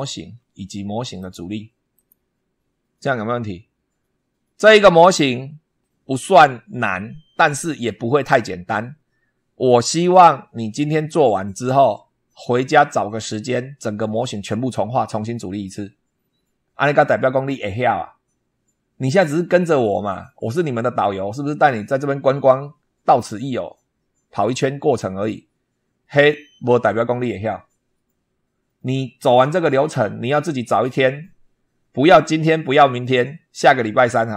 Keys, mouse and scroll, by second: 0.0 super+2, 1.0 click, 1.8 click.